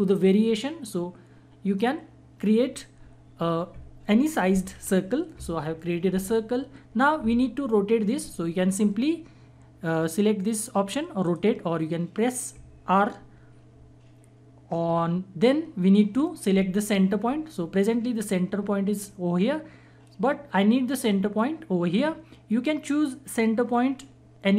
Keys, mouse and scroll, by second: 10.4-10.7 drag.